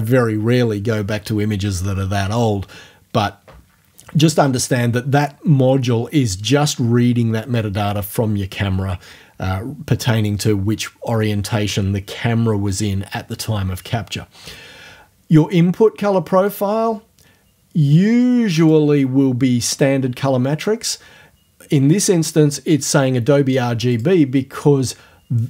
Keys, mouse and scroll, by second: 5.2 click, 16.5 click, 18.6 click, 23.9 click.